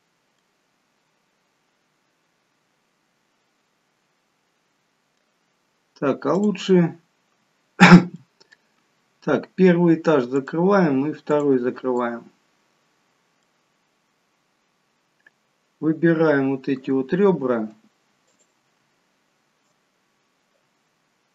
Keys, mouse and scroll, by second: 0.4 middle click, 6.3 click, 8.2 middle click, 10.4 click, 11.3 click, 12.0 middle click, 13.7 scroll up 3, 14.3-15.1 scroll down 1, 15.1-16.9 scroll down 1, 18.3 shift+click.